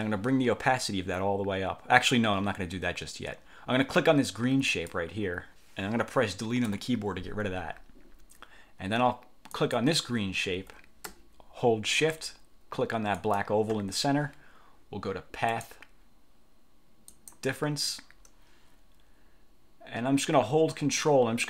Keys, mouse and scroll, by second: 4.8 click, 6.8 Delete, 9.6 click, 13.3 shift+click, 15.6 click, 17.2 click.